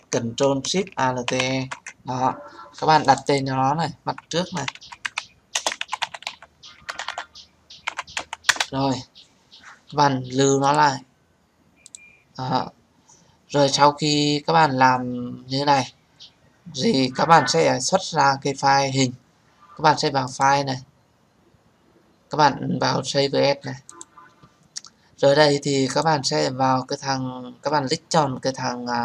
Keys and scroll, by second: 6.7 BackSpace, 8.3 Return.